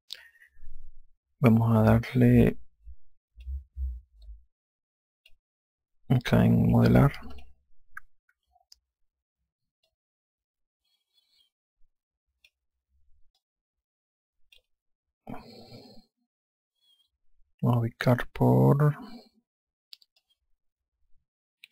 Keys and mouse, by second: 3.1 click, 4.9 click, 7.9 click, 10.5 click, 14.0 click, 20.8 click.